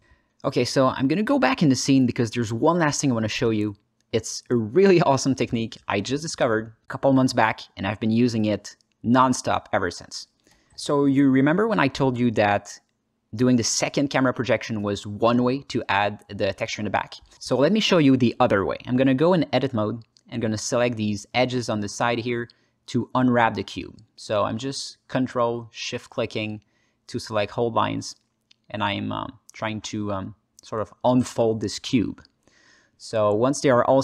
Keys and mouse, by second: 0.4 drag, 0.7 ctrl+alt+middle click, 1.0-2.3 alt+middle drag, 3.2-3.5 middle drag, 7.7-8.9 middle drag, 9.0 shift+middle click, 9.4 alt+middle click, 15.0 click, 16.2 alt+shift+z, 17.5 click, 18.2 alt+z, 18.7 ctrl+drag, 18.8 ctrl+alt+middle click, 19.3 Tab, 19.6 alt+middle click, 20.0 shift+middle click, 20.5 2, 21.0 ctrl+click, 22.1 ctrl+shift+click, 22.4 click, 22.7 ctrl+alt+click, 23.3 shift+click, 23.3 typing, 24.0 alt+middle click, 24.3 alt+shift+middle click, 24.7 middle click, 26.4 shift+click, 26.6 middle click, 27.6 ctrl+shift+click, 27.9 click, 28.8 shift+click, 29.3 alt+middle click, 30.6 ctrl+shift+click, 31.5 alt+middle click, 32.5 alt+click, 32.8 alt+middle click, 33.4 shift+click, 33.6 alt+middle click.